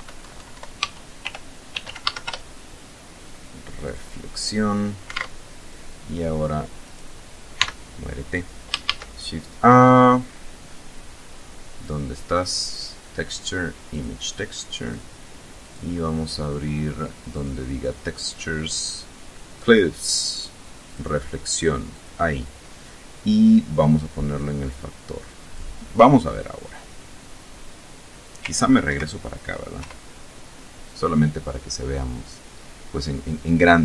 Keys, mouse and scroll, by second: 0.3-1.6 typing, 3.0 click, 4.4 alt+Tab, 6.0 right click, 6.7 x, 8.0 shift+a, 13.0 click, 14.0 click, 14.8 click, 16.5 click, 20.0 click, 21.0 click, 23.5-24.9 drag, 25.9 scroll down 2, 28.0 ctrl+Right, 28.9 ctrl+F12.